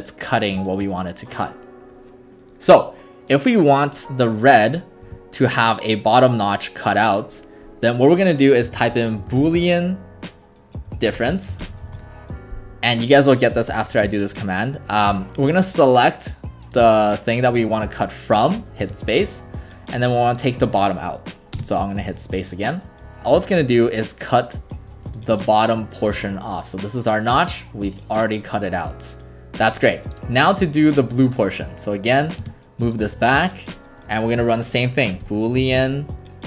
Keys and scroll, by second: 8.4-11.5 typing, 12.0 Return, 18.8 space, 21.6 space, 32.4 space, 34.9-36.4 typing.